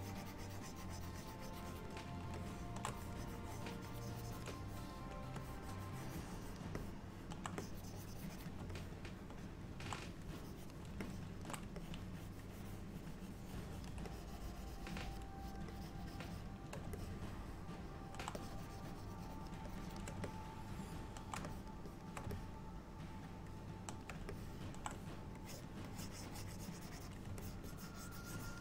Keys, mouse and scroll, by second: 0.5 click, 1.5 click, 2.0 click, 2.5 shift+middle click, 3.0 click, 3.9 click, 4.6 shift+click, 4.7 shift+click, 5.5 click, 6.8 middle click, 7.6 click, 8.8 middle click, 10.4 click, 11.1 shift+middle click, 11.8 ctrl+click, 12.2 click, 14.2 click, 15.5 shift+click, 15.8 shift+click, 17.1 middle click, 18.4 click, 19.7 shift+click, 19.9 shift+click, 20.3 middle click, 21.6 shift+click, 22.0 shift+click, 22.4 middle click, 24.4 shift+middle click, 25.5 click, 25.9 click, 26.6 click, 27.5 ctrl+click, 27.7 ctrl+click.